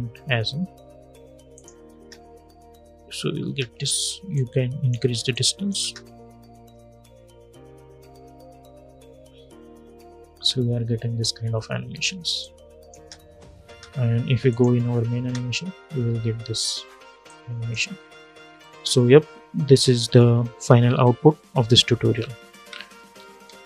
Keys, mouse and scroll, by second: 1.7 space, 4.1-5.5 drag, 5.5 space, 11.6 space, 12.1 click, 12.7 space, 14.2 click, 14.9 space, 17.0-22.4 drag, 22.4 space, 22.9 n, 23.2 space.